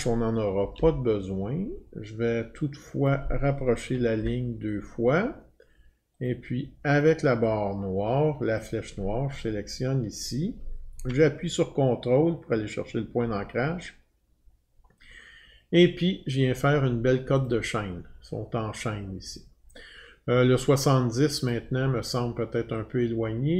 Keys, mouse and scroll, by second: 0.5 Delete, 0.8 Delete, 3.1 click, 6.3 Up, 6.3 click, 8.6 click, 11.3 click, 11.3 click, 16.4 click, 17.5 click, 21.5 click.